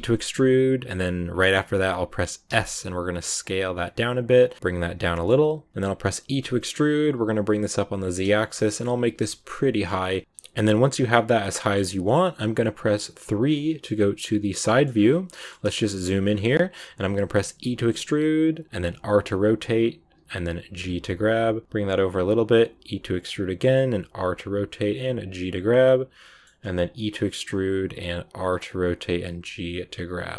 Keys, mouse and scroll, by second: 5.0 middle click, 5.7-6.2 scroll down 10, 6.2 e, 8.1 scroll down 4, 8.3 shift+middle click, 8.9 g, 10.2 scroll down 2, 10.3-13.4 middle drag, 13.4 KP_3, 14.6 shift+middle click, 14.8 scroll up 2, 15.3 shift+middle click, 15.5-16.0 scroll up 2, 15.8 shift+middle click, 16.7-17.5 scroll down 1, 17.5 e, 26.1 shift+middle click, 26.9 e.